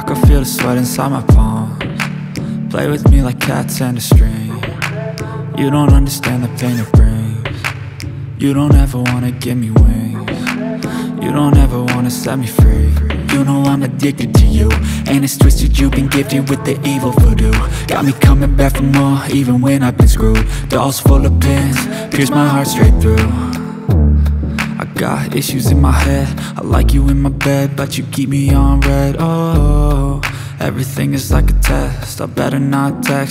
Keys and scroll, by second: 2.3 shift+d, 2.8 0, 6.1 BackSpace, 6.2 5, 6.3 Return, 10.0 2, 10.1 0, 20.6 Return, 24.6 Return, 31.9 x, 33.2 g.